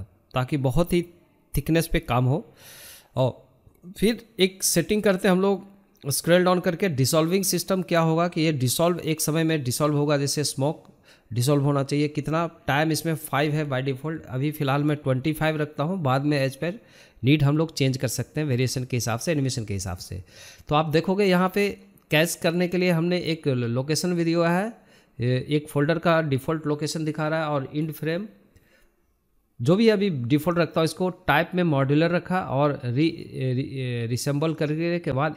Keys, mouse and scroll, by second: 4.2 scroll down 3, 9.5-11.4 drag, 11.9-13.9 drag, 19.4-19.9 scroll down 7, 20.8-22.3 drag, 22.3-23.1 scroll down 2, 23.1 click, 23.4-24.3 scroll down 7, 24.9 scroll down 2, 26.7-28.6 drag, 29.3-31.2 scroll down 4, 31.2-31.7 scroll up 1, 31.7-32.9 scroll up 2, 34.9 middle click.